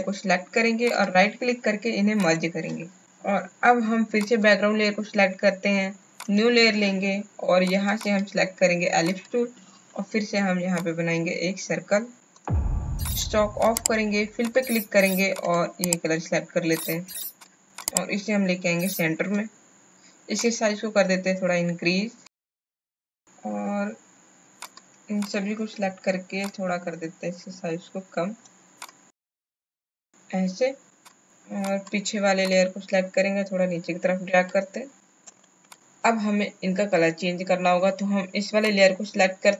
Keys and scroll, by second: 3.0 space, 35.2 Right, 35.3 Right, 35.3 Right, 35.4 Right.